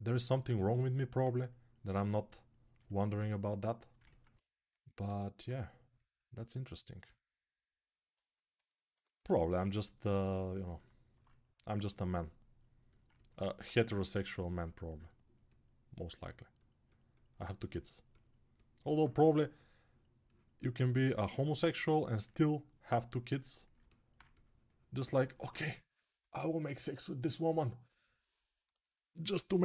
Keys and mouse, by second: 9.0-12.9 ctrl+alt+shift+drag, 18.9 1.